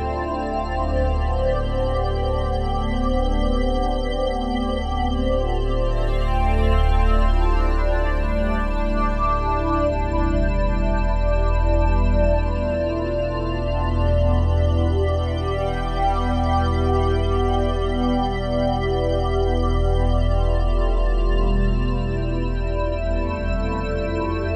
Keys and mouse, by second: 0.3 click, 1.1 g, 1.4 x, 2.5 click, 3.0 click, 3.8 g, 4.1 x, 5.6 click, 6.2 click, 7.0 g, 7.3 x, 8.5 click, 9.6 g, 9.9 x, 10.6 click, 11.2 ctrl+alt+drag, 11.8-12.2 ctrl+alt+drag, 12.4 ctrl+alt+click, 15.7-16.1 alt+drag, 16.3-19.8 alt+shift+drag, 19.8 ctrl+s, 22.1-24.5 ctrl+alt+drag, 23.0 3.